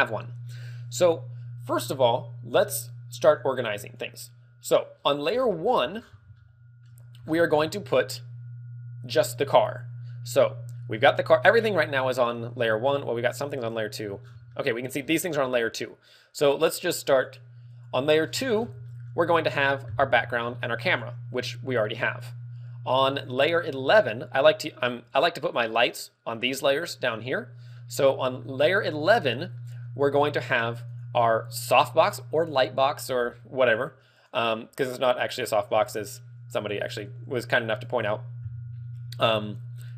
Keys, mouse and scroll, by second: 0.7-1.1 scroll down 1, 12.9 click, 13.3 click, 14.1 scroll down 8, 14.4 middle click, 15.0-15.3 scroll up 6, 15.3 middle click, 20.9 click, 25.0 click, 27.7 middle click, 29.5 middle click.